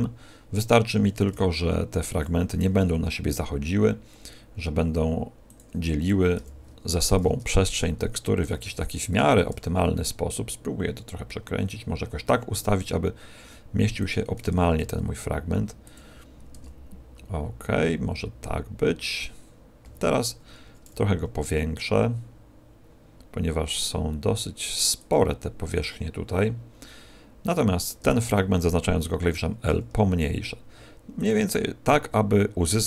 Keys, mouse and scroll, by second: 1.3 g, 2.2 click, 2.5 r, 5.5 click, 6.3 l, 8.5 g, 9.1 click, 9.5 r, 14.1 click, 14.7 s, 15.9 click, 19.1 click, 19.8 s, 25.1 click, 28.0 l, 31.2 click, 31.8 g.